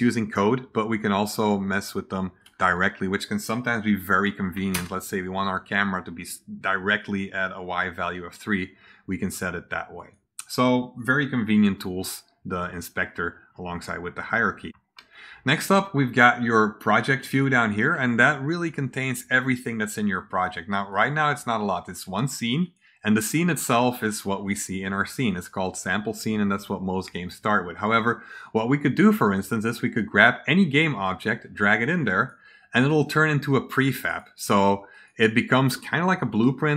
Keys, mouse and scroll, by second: 1.0-1.4 drag, 2.3 drag, 9.9 click, 19.4 click, 20.2 click, 20.8 click, 22.5 click, 29.6 click, 31.1-32.2 drag, 33.6 click, 34.0 click, 34.8 click.